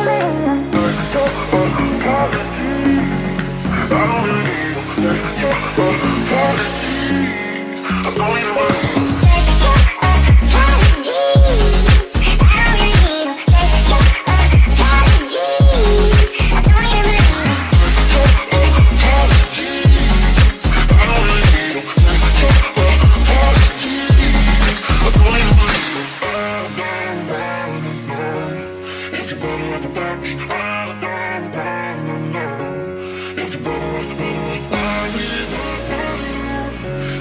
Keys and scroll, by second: 12.0 ctrl+s.